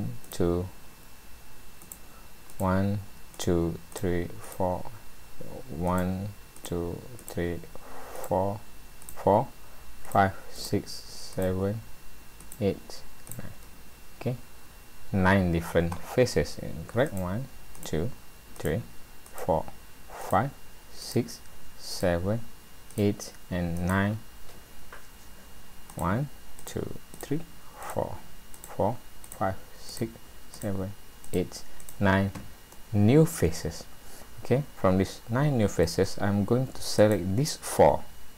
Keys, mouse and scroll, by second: 0.3 click, 1.8 click, 2.5 click, 3.4 click, 3.9 click, 4.4 click, 5.9 click, 6.6 click, 7.2 click, 8.2 click, 9.0 click, 10.1 click, 10.6 click, 11.3 click, 12.5 click, 13.3 click, 17.1 click, 17.8 click, 18.6 click, 19.3 click, 20.2 click, 21.0 click, 21.9 click, 22.9 click, 23.8 click, 25.9 click, 26.6 click, 27.2 click, 27.8 click, 28.5 click, 29.2 click, 29.9 click, 30.5 click, 31.2 click, 31.8 click, 32.7 middle click, 37.0 click, 38.0-38.3 scroll up 2.